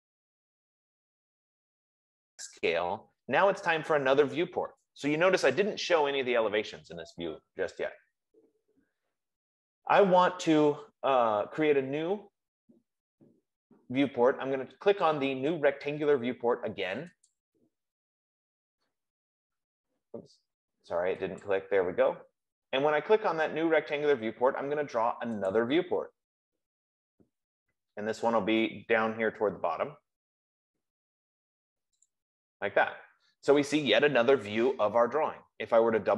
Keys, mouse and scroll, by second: 4.2 click, 5.5 Escape, 6.1 Escape, 16.7 F15, 17.7 click, 21.7 click, 25.8 click, 28.6-29.1 scroll down 1, 29.9 scroll down 1, 32.4 click.